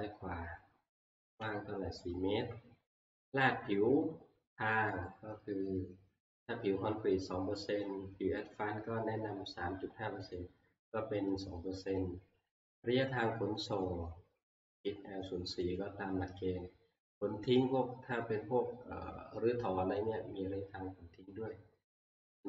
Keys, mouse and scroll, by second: 5.0-10.0 drag, 13.7 click, 15.7 click.